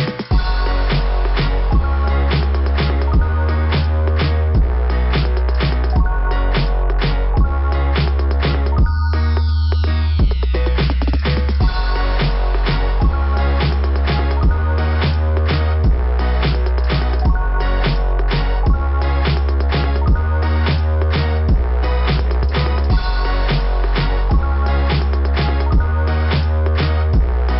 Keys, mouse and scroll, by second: 9.2 click, 9.5 click, 9.7 click, 10.0 click, 10.2 click, 10.3 click, 10.5 click, 10.6 click, 10.8 click, 10.9 click, 11.1 click, 11.3 click, 11.4 click, 11.6 click, 13.5 scroll up 2, 16.8 scroll down 2, 22.4 scroll down 1, 22.4 ,, 23.9 click, 27.0 click.